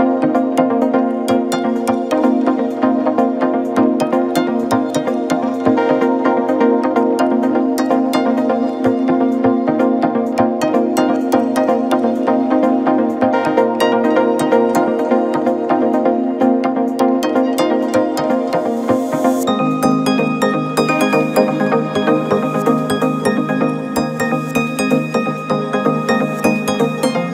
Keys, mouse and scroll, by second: 0.8 g, 2.1 scroll up 2, 2.3-2.7 scroll down 1, 2.7 Tab, 2.9-3.5 scroll down 1, 3.5-5.1 middle drag, 5.1-5.5 scroll up 1, 5.5 KP_7, 6.8 Tab, 7.5 ctrl+r, 8.5 middle click, 9.0-9.6 scroll up 3, 9.6 g, 11.0 scroll down 1, 11.2-12.3 middle drag, 12.3 click, 12.8 KP_1, 13.6 shift+click, 14.7-15.3 scroll up 1, 15.3 shift+middle click, 15.9-16.5 scroll up 2, 16.5 middle click, 17.0 click, 18.0 KP_1, 18.9 g, 20.0-20.5 scroll down 4, 20.5 KP_7, 20.9 Tab, 22.8-27.1 drag.